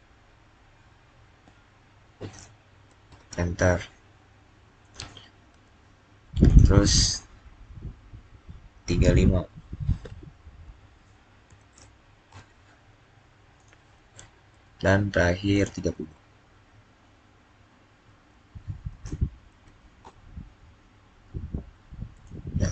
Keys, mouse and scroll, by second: 1.9 click, 2.4-3.1 typing, 4.7 click, 10.5 click, 11.1-11.8 typing, 12.2 Return, 13.4 click, 18.6-19.4 typing, 19.9 Return.